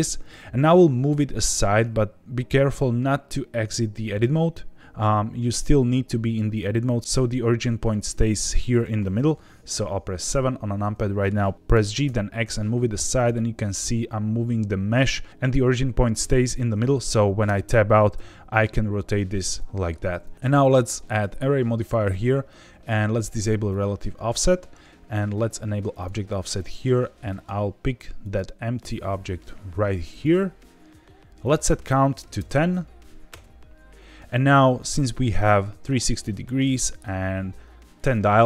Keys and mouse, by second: 10.2 KP_7, 10.9 shift+middle click, 11.5 ctrl+z, 11.7 g, 12.0 x, 13.1 click, 17.4 Tab, 18.1 r, 19.4 Escape, 20.3 ctrl+z, 21.2-22.0 drag, 23.6 click, 25.9 click, 26.5 click, 28.2 click, 31.4-33.8 drag, 34.8 click.